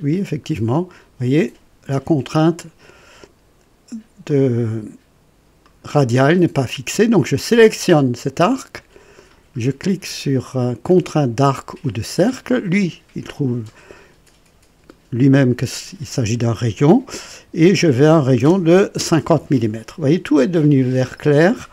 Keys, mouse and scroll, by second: 4.3 click, 5.6 click, 11.8 click, 18.0 KP_5, 18.4 KP_0, 18.9 Return, 19.2 Return.